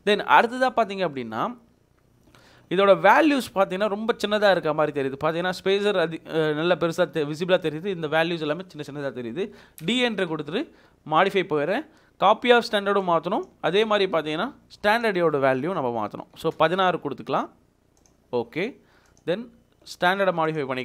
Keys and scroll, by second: 9.6 d, 9.8 space, 16.2-16.5 typing.